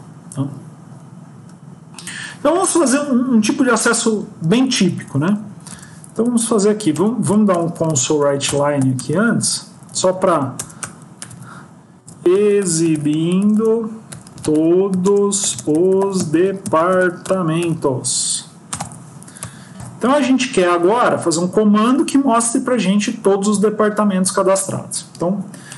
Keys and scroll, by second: 4.8 BackSpace, 6.2 Up, 6.3 Up, 6.5 Up, 8.3 Return, 9.6 Down, 19.9 ctrl+s.